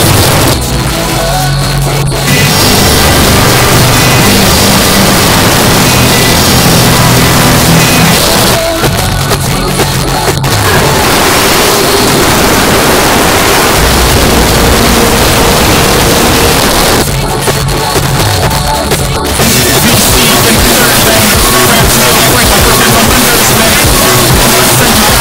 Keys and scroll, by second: 0.2 Page_Down, 8.2 Page_Down, 16.6 Page_Down.